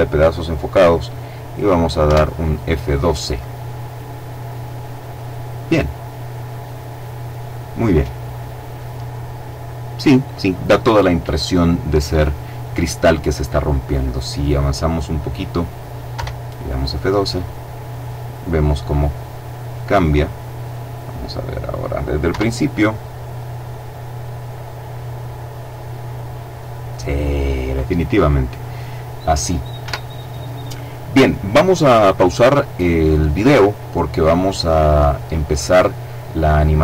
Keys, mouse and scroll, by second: 1.3 F12, 14.4 click, 15.4 F12, 20.6 click, 21.5 F12, 29.0 Escape.